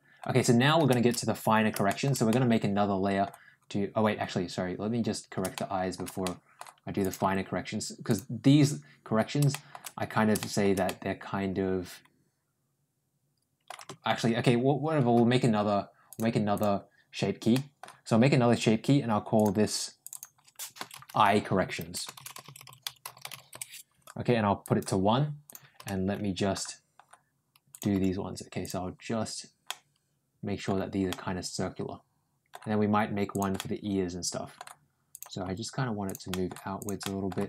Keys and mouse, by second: 1.7 shift+middle click, 2.1 middle click, 5.4 shift+middle click, 6.1 middle click, 6.8 click, 7.1 g, 9.3 middle click, 10.2 middle click, 10.7-11.9 middle drag, 12.0-13.5 middle drag, 15.9 ctrl+click, 17.3 ctrl+middle click, 19.9 click, 20.0-23.9 drag, 22.4 r, 24.4 click, 25.6 Tab, 27.6 click, 27.7 g, 29.5 middle click, 30.9-32.3 middle drag, 33.1 click, 33.4-34.4 middle drag, 34.9 click, 35.3 g, 36.1 middle click, 36.6 click, 36.8 middle click, 37.2 g.